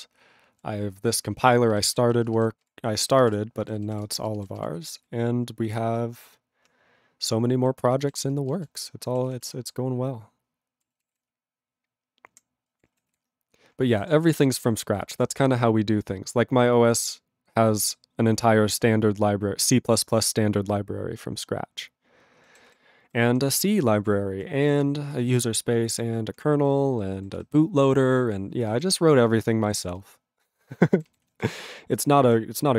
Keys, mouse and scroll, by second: 1.0 ctrl+a, 1.3 ctrl+space, 1.4 ctrl+e, 1.4 ctrl+g, 1.7 ctrl+b, 1.9 ctrl+b, 2.0 ctrl+space, 2.4 ctrl+alt+b, 2.6 ctrl+g, 3.0 ctrl+a, 3.1 ctrl+space, 3.6 ctrl+b, 3.7 ctrl+b, 3.9 ctrl+g, 4.0 ctrl+space, 4.5 ctrl+alt+b, 4.6 ctrl+g, 5.0 ctrl+s, 5.6 ctrl+a, 7.6 ctrl+e, 7.9 ctrl+b, 8.0 ctrl+b, 8.2 ctrl+space, 8.7 ctrl+alt+b, 8.8 ctrl+g, 9.3 ctrl+s, 9.4 ctrl+a, 9.5-10.8 ctrl+n, 11.1 ctrl+s, 11.2-12.3 ctrl+p, 12.7 ctrl+p, 13.1 ctrl+s, 14.0 ctrl+p, 14.2 ctrl+p, 14.3 ctrl+p, 14.7 ctrl+space, 14.8 ctrl+n, 15.0 ctrl+n, 15.1 ctrl+g, 15.5 ctrl+s, 22.6 ctrl+s, 23.0 ctrl+n, 23.3 ctrl+p, 23.5 ctrl+space, 23.6 ctrl+n, 24.1 ctrl+n, 24.1 ctrl+n, 24.7 ctrl+p, 25.0 ctrl+g, 25.4 ctrl+s, 25.4 ctrl+space, 25.6-26.4 ctrl+p, 26.9 ctrl+g, 27.3 ctrl+s, 28.7 ctrl+s, 29.8 ctrl+space, 29.9-30.7 ctrl+n, 31.0 ctrl+n, 31.1 ctrl+g, 31.4 ctrl+s, 31.5-32.3 ctrl+n, 32.5 ctrl+n.